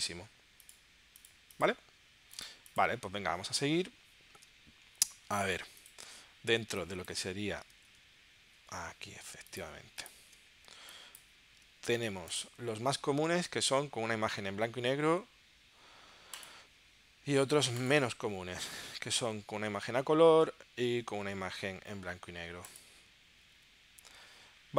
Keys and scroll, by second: 3.6 super+Tab, 7.8 super+<, 10.3 super+w.